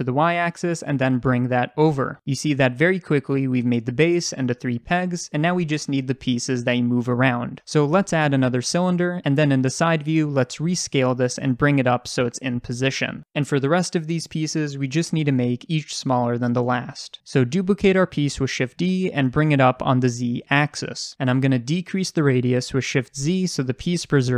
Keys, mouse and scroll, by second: 3.3-4.2 middle drag, 3.8-4.2 scroll down 2, 4.2 click, 4.5-8.1 middle drag, 8.1-9.0 drag, 9.0 middle click, 9.4 click, 9.9 scroll up 1, 10.1 shift+middle click, 10.2 s, 10.7 click, 10.8 s, 11.1 click, 12.5 s, 13.2 click, 17.2-21.6 shift+middle drag, 18.5 shift+d, 21.6 click, 22.0 s.